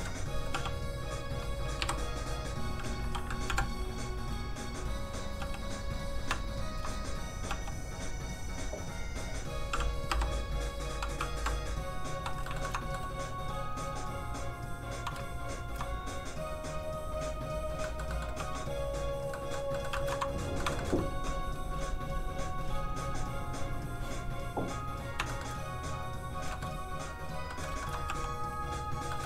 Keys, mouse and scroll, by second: 0.5 shift+f, 0.6 click, 2.0 click, 2.0 i, 3.5 k, 3.8 click, 5.4 f, 5.6 click, 6.6 shift+click, 7.0 click, 7.1 click, 7.5 f, 7.7 click, 10.1 i, 10.4 click, 11.4 k, 11.7 click, 12.5 shift+middle click, 12.8 shift+middle click, 15.2 shift+click, 16.0 click, 16.1 click, 17.9 middle click, 18.4 f, 18.5 click, 19.4 middle click, 20.0 shift+middle click, 20.6 middle click, 20.7 shift+middle click, 23.6 click, 25.3 shift+middle click, 25.7 middle click, 25.8 click, 26.5 shift+middle click, 26.9 middle click, 27.0 click, 27.5 middle click, 27.8 shift+middle click, 28.1 middle click, 28.2 f, 28.3 click, 29.1 middle click.